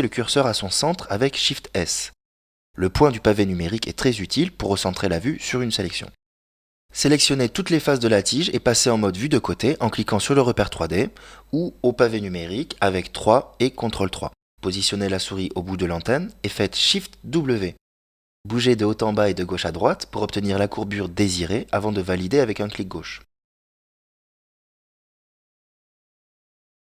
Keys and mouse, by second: 2.4 ctrl+KP_3, 3.7-6.9 shift+middle drag, 8.8 ctrl+Tab, 10.2 right click, 11.4-14.4 ctrl+KP_Add, 14.6 ctrl+KP_3, 18.2 shift+w.